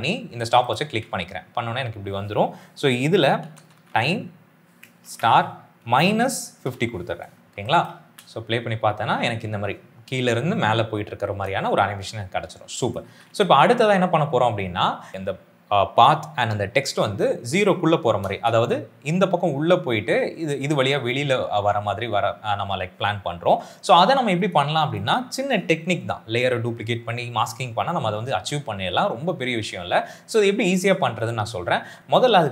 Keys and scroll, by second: 3.1-7.9 typing, 12.3 space, 12.9 s, 13.1 s, 15.1 space, 18.2 space.